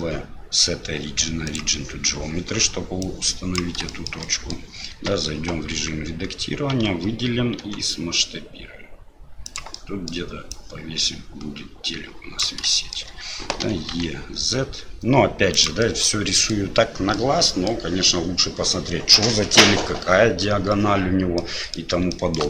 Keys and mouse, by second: 3.0 click, 3.9 shift+middle drag, 4.3 middle click, 4.9 Tab, 5.8 s, 6.7 a, 7.6 s, 9.8 middle click, 10.6-12.4 drag, 12.8 shift+middle click, 15.9 middle click, 17.2 middle click, 21.5 middle click, 22.2 shift+middle click.